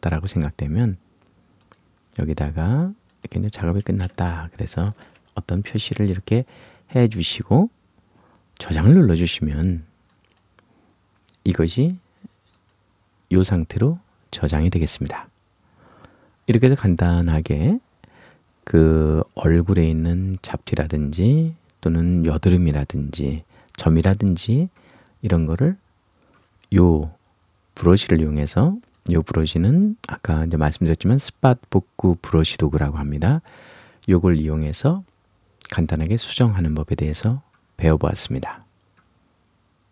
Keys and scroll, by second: 4.1 space, 5.0 shift+p, 5.5 shift+s.